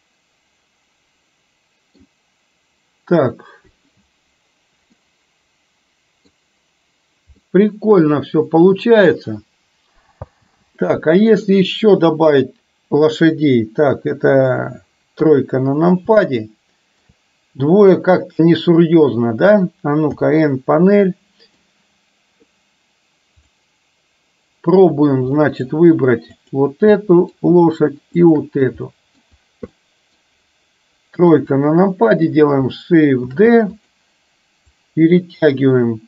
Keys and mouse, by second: 5.1-6.3 middle drag, 7.5-9.2 middle drag, 10.2 space, 10.8-11.6 middle drag, 12.2 KP_7, 15.3 KP_3, 16.3-16.7 shift+middle drag, 16.8 shift+middle click, 20.2 n, 21.1-21.7 middle drag, 23.5 click, 25.5 middle drag, 26.5 click, 27.1 middle drag, 28.2 shift+click, 29.0-29.3 middle drag, 29.8-30.2 middle drag, 31.3 KP_3, 33.5 shift+d, 34.8-36.0 drag.